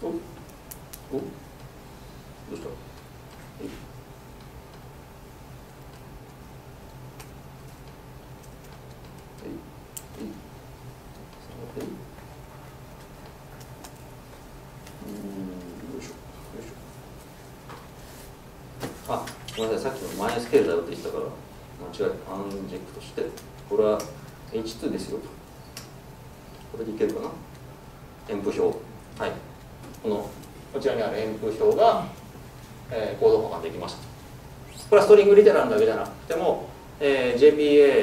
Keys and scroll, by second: 11.6 F4, 19.0 ctrl+space, 19.4 Escape, 20.3 alt+Return, 27.4 ctrl+space, 28.7 Tab.